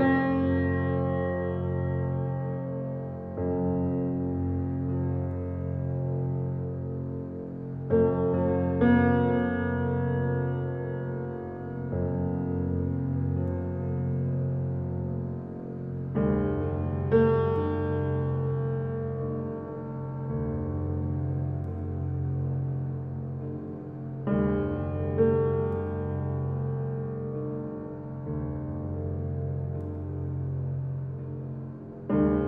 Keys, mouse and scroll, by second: 0.2-1.7 middle drag, 3.4 click, 4.0 click, 4.5 click, 6.2-8.4 drag, 12.5-14.7 drag, 16.0 click, 21.9-23.6 drag, 23.6-24.0 scroll down 5, 24.0-25.5 middle drag, 25.8 click, 26.1 click, 29.9 KP_0, 30.5-31.6 middle drag, 31.6 click, 32.1-32.4 scroll down 4.